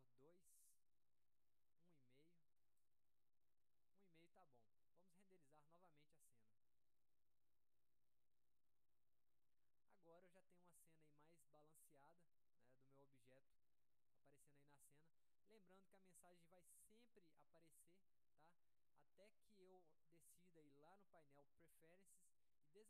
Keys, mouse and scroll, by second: 5.8 click, 15.3 click, 16.9 click.